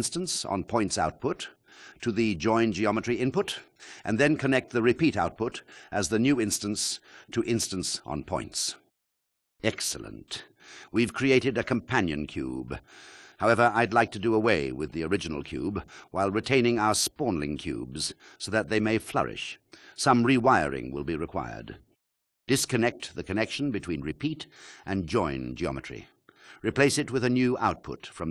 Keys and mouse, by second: 0.5 click, 5.4 click, 19.8 click, 20.0 click, 23.0 click, 24.6-25.9 shift+drag, 27.0 click.